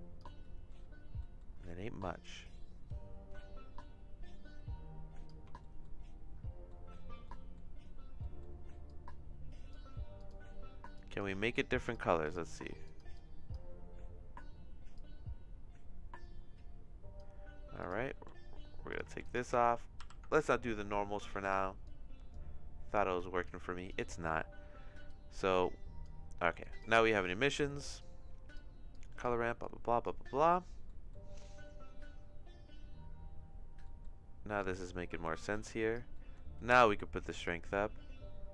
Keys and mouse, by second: 0.4 middle click, 1.3 middle click, 2.3-5.3 drag, 5.7 middle click, 6.7 middle click, 7.4 middle click, 8.3 middle click, 9.1 click, 10.1 click, 11.8 click, 12.3 click, 14.9-17.2 drag, 17.8 click, 18.2 x, 18.9 click, 19.2 click, 19.2 x, 20.2 ctrl+t, 21.4 click, 21.8 click, 23.4 click, 25.0-26.1 drag, 26.6 click, 27.2 click, 28.0 click, 28.9 click, 29.6 click, 31.0 middle click, 33.9 middle click, 34.7-35.9 drag, 36.1 middle click, 36.8 middle click, 37.5-38.5 drag.